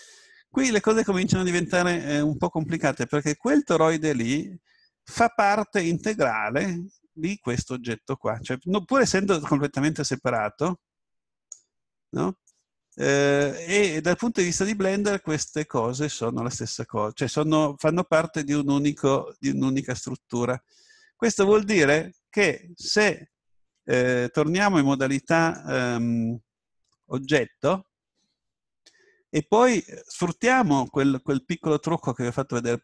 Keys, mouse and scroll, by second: 10.4-12.3 drag, 12.5-16.8 drag, 15.9-17.8 middle drag, 18.3-20.1 drag, 20.9-22.2 scroll down 1, 22.2-24.6 middle drag, 25.5-27.3 drag, 28.5-32.8 middle drag.